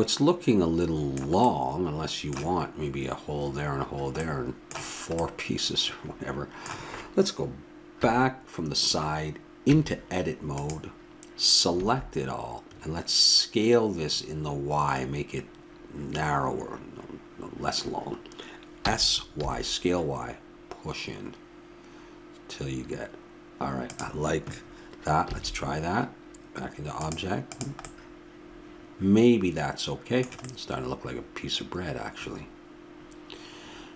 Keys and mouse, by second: 8.0 KP_3, 9.6 Tab, 11.7 a, 25.3 a, 27.8-32.7 middle drag.